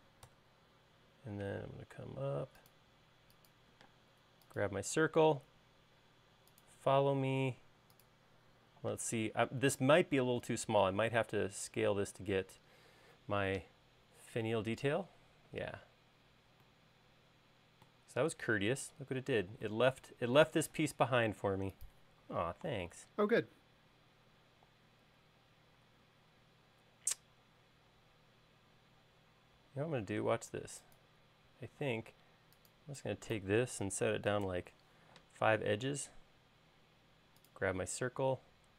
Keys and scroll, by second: 0.7 Return, 4.4 space, 21.4 space, 30.5 |, 31.1 space, 34.9 typing, 36.5 space.